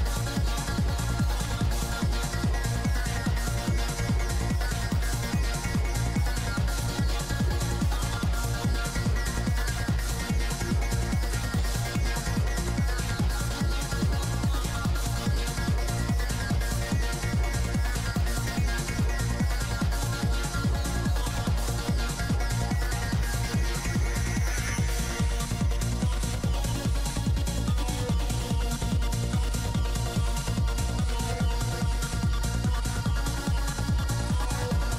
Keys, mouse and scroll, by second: 0.6-2.7 middle drag, 3.2-4.8 middle drag, 6.3 f, 6.6 click, 6.6 middle click, 7.8-9.3 drag, 7.8 middle click, 8.6 middle click, 10.5 f, 10.6-12.8 drag, 12.4 right click, 14.7 Tab, 15.1 KP_3, 15.3 KP_5, 16.8 ctrl+i, 17.5 ctrl+z, 18.4 c, 24.7 Tab, 24.7 click, 25.2 KP_5, 25.4 z, 28.5 g, 28.5 f, 28.8 f, 29.1 f, 29.4-30.8 drag, 31.2 f, 31.6-33.0 drag, 32.0 f, 34.4-34.9 drag, 34.8 ctrl+z.